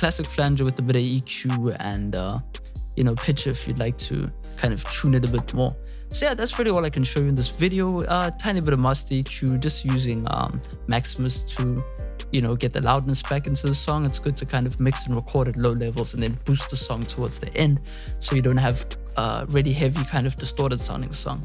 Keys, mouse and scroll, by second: 10.6 click, 13.2-13.5 drag, 14.6-21.4 drag.